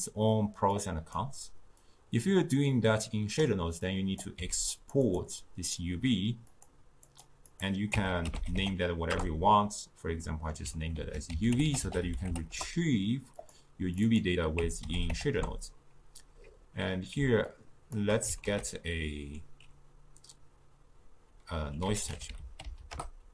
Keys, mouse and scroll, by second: 7.1-23.3 drag.